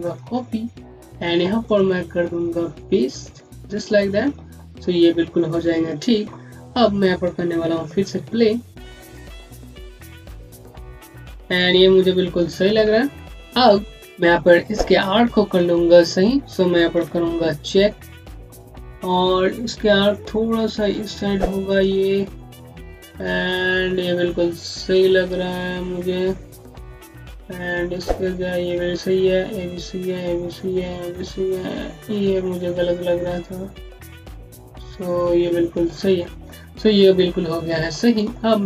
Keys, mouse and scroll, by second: 1.5 right click, 3.3 click, 6.4 click, 6.5 scroll down 1, 8.0 v, 12.6 v, 13.3-14.0 scroll down 1, 14.0 scroll up 1, 17.6 ., 20.0 click, 22.0 ., 22.7 scroll down 1, 24.8 click, 26.8 scroll down 1, 27.4 ., 27.9 scroll down 1, 28.4 ., 29.2-29.5 scroll down 1, 30.1-32.0 typing, 33.2 click, 34.5-35.2 typing, 36.4 scroll down 1, 37.9 alt+middle click, 38.2 scroll up 1.